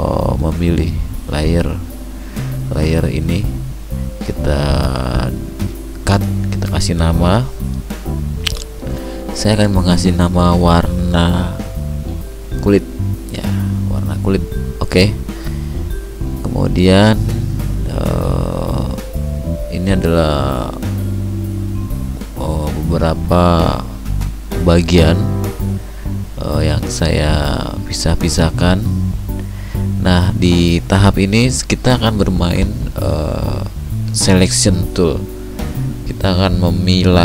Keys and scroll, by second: 18.9 ctrl+alt+z.